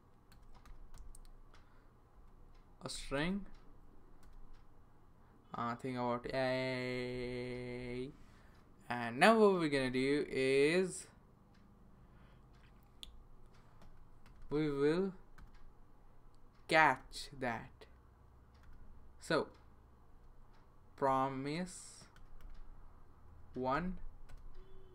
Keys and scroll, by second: 0.3-0.9 typing, 2.1-4.7 typing, 6.2-7.7 typing, 14.3 Return, 14.4 Return, 15.4 typing, 17.0 r, 18.6 p, 20.1-22.9 typing, 23.3 Down, 24.3 Return.